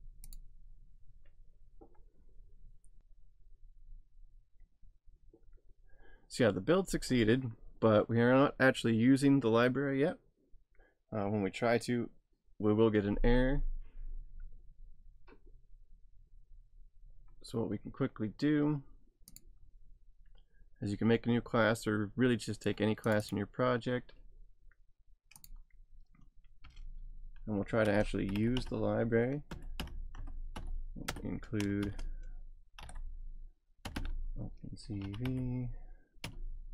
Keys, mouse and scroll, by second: 19.3 click, 23.1 click, 25.4 click, 26.6 Return, 27.6-36.7 typing.